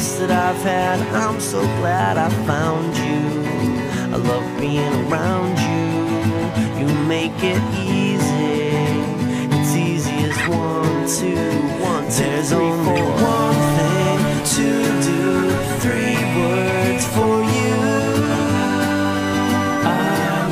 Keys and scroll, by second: 1.4 ctrl+z, 1.8 ctrl+z, 2.2 ctrl+z, 3.1 ctrl+z, 3.4 ctrl+z, 4.2 ctrl+z, 10.7 ctrl+z, 12.2 ctrl+z, 12.9 ctrl+z, 13.9 ctrl+z, 17.2 ctrl+z.